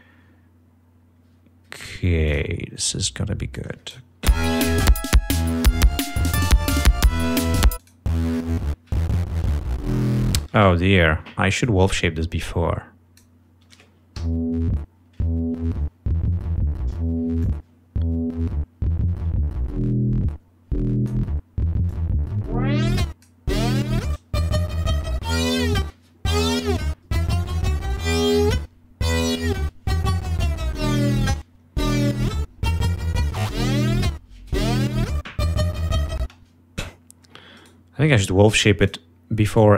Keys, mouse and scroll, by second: 2.4 click, 3.7 click, 4.4 l, 5.2-7.4 drag, 7.9 click, 10.6 space, 11.7-13.5 drag, 14.3 l, 17.5-21.4 drag, 22.0-23.6 drag, 32.3 click, 36.4 space, 37.7 right click, 38.9 click, 39.7 right click.